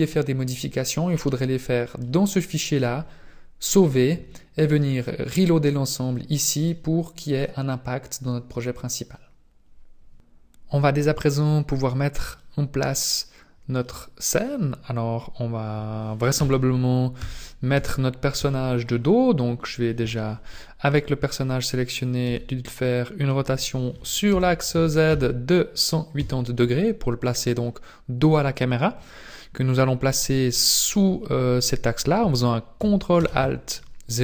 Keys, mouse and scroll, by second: 7.1-8.0 scroll down 4, 12.3 middle click, 12.9-13.8 scroll down 6, 13.8 middle click, 16.3 KP_1, 17.3 KP_5, 17.7 KP_1, 18.3 KP_5, 18.9-19.6 scroll up 5, 20.9 right click, 22.2 r, 33.1 ctrl+alt+KP_0.